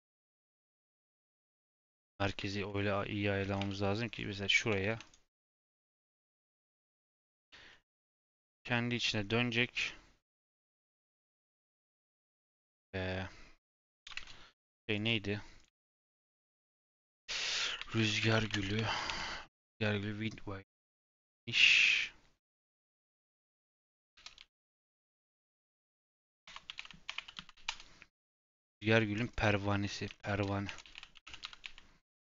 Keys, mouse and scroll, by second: 0.9-1.7 scroll up 2, 1.7 KP_1, 2.2-3.4 scroll up 11, 2.5 shift+middle click, 3.4 Tab, 3.5 3, 4.1 click, 4.5 shift+s, 4.8 Tab, 5.0-6.6 right drag, 6.6-7.3 scroll down 11, 7.3 r, 8.2 r, 10.6 scroll down 1, 10.7 middle click, 11.1 scroll up 4, 22.0 middle click, 22.4-22.8 scroll down 2, 22.8 click, 23.1 F2.